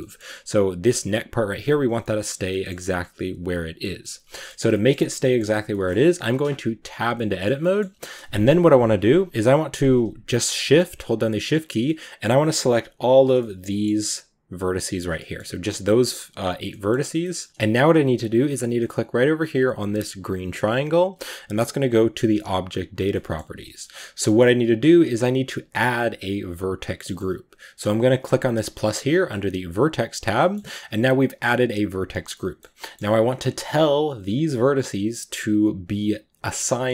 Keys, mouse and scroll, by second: 1.5-1.9 scroll down 2, 1.9-6.7 middle drag, 6.7 Tab, 7.0-8.8 middle drag, 8.8-9.2 scroll up 2, 9.8 right click, 10.3 shift+right click, 11.5 shift+right drag, 11.7-12.6 middle drag, 12.6 shift+right drag, 12.9 shift+right click, 13.1 scroll down 2, 13.2 middle click, 13.8-14.1 scroll up 2, 14.4 shift+right click, 14.8 right click, 14.9 scroll down 1, 15.0 middle click, 15.3 g, 16.5 middle drag, 16.8-17.1 scroll up 2, 17.1 middle click, 17.5-18.7 scroll down 2, 23.0-28.7 middle drag, 28.7-30.2 drag, 30.2-33.9 middle drag, 33.9 g.